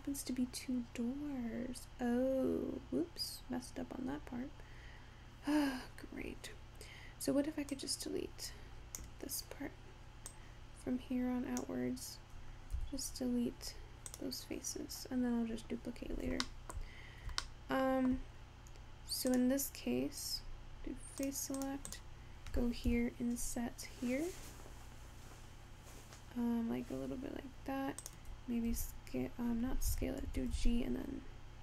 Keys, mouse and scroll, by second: 0.3-0.9 scroll down 9, 0.9-1.6 scroll up 7, 1.6-2.5 scroll down 5, 2.5-3.1 scroll up 1, 3.1 scroll down 2, 3.7-4.5 scroll up 2, 4.5-7.5 scroll down 1, 7.7 click, 10.4 click, 12.8 x, 16.5 shift+middle click, 17.0-17.6 scroll up 2, 17.6-19.3 shift+middle drag, 19.3 click, 21.3 click, 21.7 click, 22.0 click, 22.9 i, 28.7 s, 30.4 g.